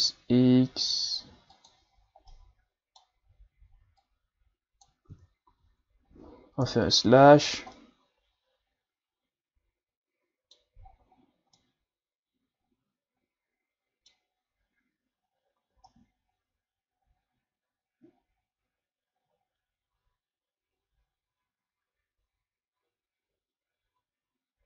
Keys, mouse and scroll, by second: 2.3-4.0 middle drag, 4.0-5.1 drag, 5.1 Tab, 5.5 a, 5.7-6.5 scroll down 3, 6.7 KP_Divide, 7.5 scroll down 3, 7.7-10.8 middle drag, 10.9 shift+scroll down 5, 11.1-11.6 scroll up 6, 11.6-14.6 middle drag, 15.3-15.7 scroll down 1, 15.8-18.9 middle drag.